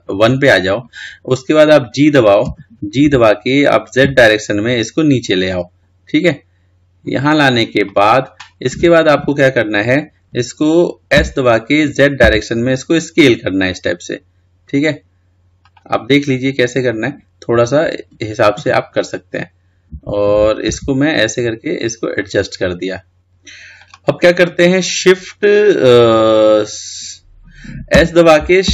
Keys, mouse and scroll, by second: 0.0 KP_1, 2.6 g, 19.5 g.